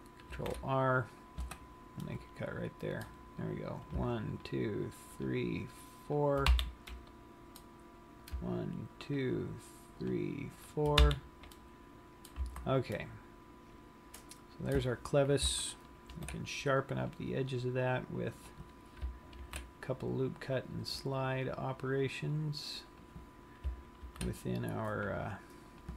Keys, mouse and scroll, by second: 0.5 ctrl+r, 2.2 middle click, 4.2 click, 4.6 shift+click, 5.5 shift+click, 6.6 f, 7.1 middle click, 8.5 click, 9.3 shift+click, 10.2 click, 11.3 f, 11.8 middle click, 12.4 shift+click, 12.8 a, 13.3 middle click, 16.5 ctrl+r, 18.7 click, 19.7 ctrl+r, 23.3 click, 24.4 ctrl+r.